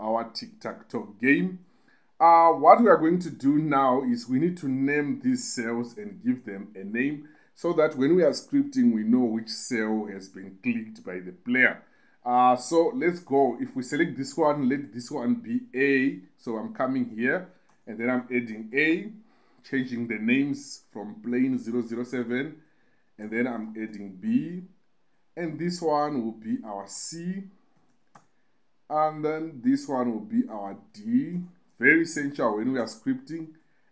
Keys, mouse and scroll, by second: 5.7 middle click, 6.2 middle click, 14.3 click, 17.5 click, 17.8 middle click, 18.5 click, 21.7 click, 22.5 BackSpace, 23.0 click, 23.2-24.6 drag, 23.2 middle click, 26.9 click, 31.5-33.1 drag.